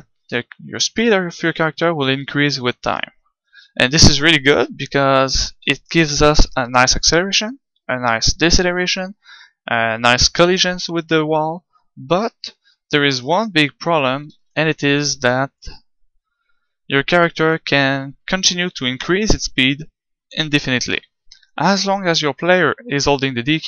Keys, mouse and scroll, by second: 5.6-7.4 drag, 14.3 ctrl+z.